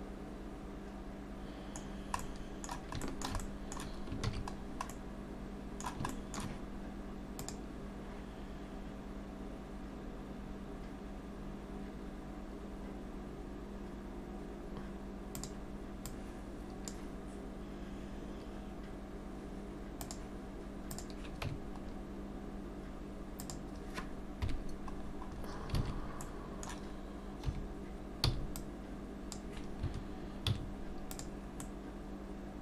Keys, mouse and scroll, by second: 1.9 scroll down 1, 2.2 middle click, 3.0 shift+middle click, 3.4 middle click, 4.3 ctrl+s, 4.6 scroll down 2, 4.9 middle click, 6.1 shift+middle click, 20.9 click, 21.5 Tab, 21.8-23.4 scroll up 2, 23.4 click, 23.4 scroll up 1, 24.4 KP_Decimal, 25.1-25.8 scroll down 6, 25.8 alt+a, 26.2 middle click, 27.5 3, 28.3 c, 31.3 x, 31.6 middle click.